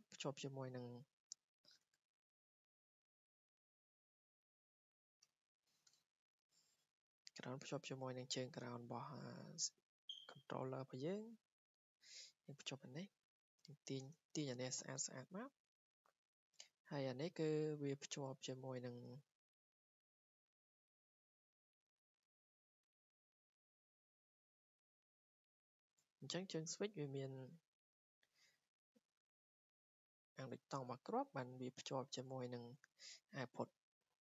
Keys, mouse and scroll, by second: 1.3 click, 2.6 click, 4.2 click, 5.1 click, 5.9 Delete, 7.2 click, 7.5 Escape, 9.3 w, 10.2 click, 11.8 click, 12.4 Escape, 13.6 click, 14.3 ctrl+z, 15.6 click, 15.8 Escape, 16.9-17.4 scroll down 4, 17.4 scroll, 18.5 click, 18.9 Escape, 19.2 scroll, 21.7 click, 21.9 Escape, 22.3 click, 22.8 Delete, 23.9 w, 24.5 click, 24.9 click, 25.1 Escape, 25.3-25.7 scroll, 26.5 Escape, 28.1 click, 28.2 Escape, 28.4 scroll, 29.0 middle click, 29.1 middle click, 30.8 scroll down 2, 32.2 click, 32.5 scroll up 2, 32.8 Escape, 32.8 scroll, 33.5 w, 34.0 click.